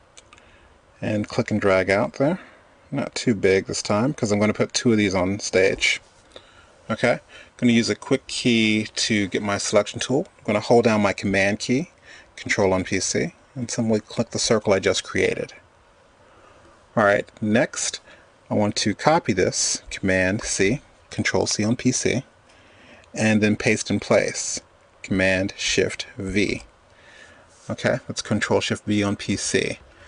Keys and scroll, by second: 20.1 super+c, 25.6 shift+super+v.